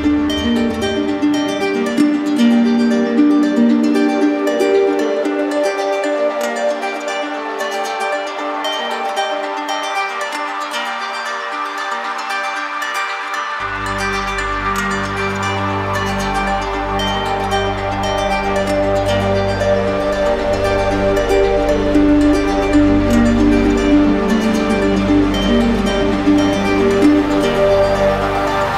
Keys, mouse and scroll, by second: 0.1 click, 1.4 click, 4.1 click, 4.9 click, 6.4 alt+click, 6.4 alt+click, 6.9 click, 11.7 click, 11.9 ctrl+z, 19.6 click, 20.8 alt+click, 22.3 click, 23.0 click, 23.7 click, 24.5 alt+click, 24.5 alt+click, 27.3 click, 27.9 shift+click.